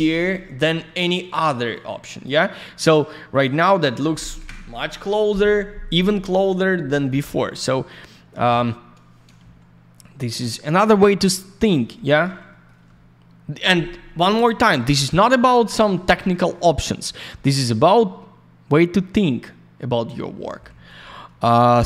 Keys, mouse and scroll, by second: 1.7 click, 3.3 click, 3.4 click, 6.1 click, 8.1 alt+middle click, 9.4 shift+a, 12.5 middle click, 12.6 middle click, 16.5 alt+middle click, 16.6 alt+click, 17.3 middle click, 17.8 alt+middle click, 20.6 alt+я, 20.8 click.